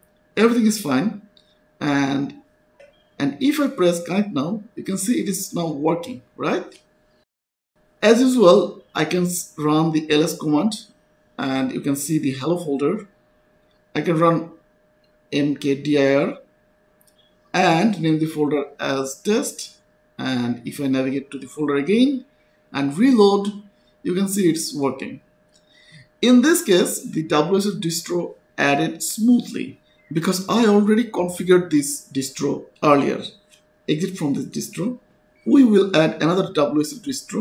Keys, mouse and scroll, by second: 0.1 2, 0.2-2.2 scroll up 1, 3.9 click, 6.8 click, 10.5 s, 10.7 Return, 12.9 click, 14.9-18.5 typing, 18.6 Return, 21.5 click, 24.4 click, 27.5 click, 31.0 click, 33.3 click, 33.9 click, 34.0-35.7 typing.